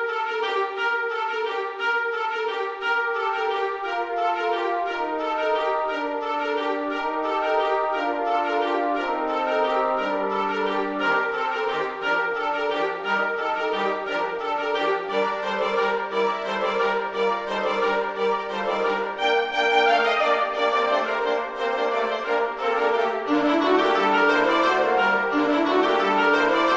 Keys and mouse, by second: 0.5 g, 1.5 g, 1.9 click, 2.1 e, 2.9 click, 3.0 e, 3.7 click, 3.9 e, 5.0 click, 6.0 click, 6.3 middle click, 7.0 click, 7.8-12.0 typing, 8.2 click, 8.8 click, 9.9 click, 10.5 click, 11.9 click, 13.2 click, 14.1 g, 14.6 click, 15.0 g, 15.5 click, 15.6 e, 16.4 click, 16.5 e, 17.4 click, 18.0 click, 18.3 g, 18.6 click, 19.1 click, 19.2 g, 19.3 click, 21.1 click, 21.9 x, 22.4 click, 23.4 click, 23.7 e, 24.5 click, 24.6 e, 25.4 click, 26.5 g.